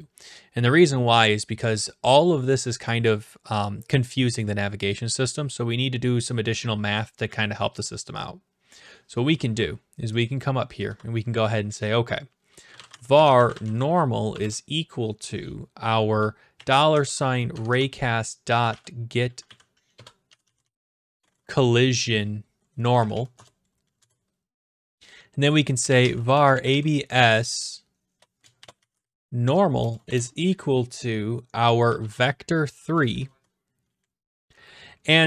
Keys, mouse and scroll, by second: 10.3 click, 10.9 Return, 12.4-14.3 typing, 16.5-21.2 typing, 22.8 Down, 23.0 Down, 23.1 Down, 23.3 Return, 24.0 Return, 25.5-27.2 typing, 28.3-30.1 typing, 31.6-32.6 typing, 33.3 Left, 34.1 Down, 34.2 Up, 34.2 Right, 34.5 click, 34.5 BackSpace.